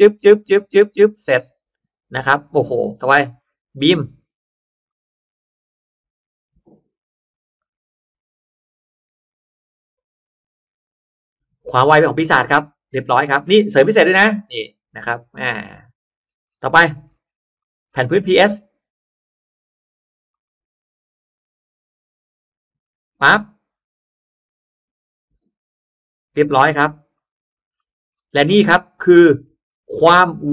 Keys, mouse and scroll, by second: 3.1 click, 4.8 click, 12.6 click, 13.0 scroll down 1, 13.3-14.0 scroll up 4, 14.1-15.8 middle drag, 15.9-17.5 scroll down 8, 17.5 middle click, 20.2 click, 21.6 click, 27.0 click, 27.4-28.2 scroll down 1, 28.4 middle click, 28.6-29.0 scroll down 1, 29.0-29.3 scroll up 1, 29.1 middle click, 29.3-30.2 scroll down 2, 30.0 middle click.